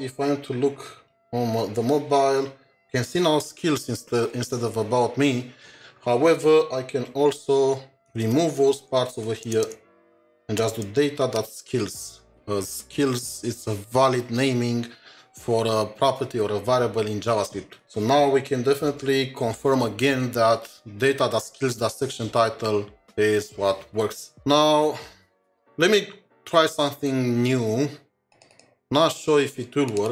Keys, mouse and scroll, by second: 8.1 typing, 8.1 Delete, 8.2 Delete, 9.0 ctrl+Left, 9.5 BackSpace, 11.0 typing, 13.2 typing, 28.5 typing, 28.6 double click.